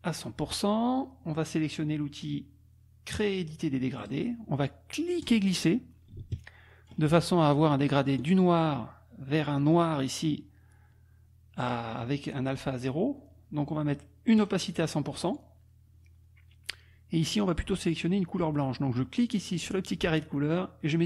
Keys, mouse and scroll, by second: 0.2 click, 4.1 click, 5.2-7.1 drag, 8.2 click, 9.8 click, 14.4 right click, 15.3 click, 17.5 click, 19.4 click.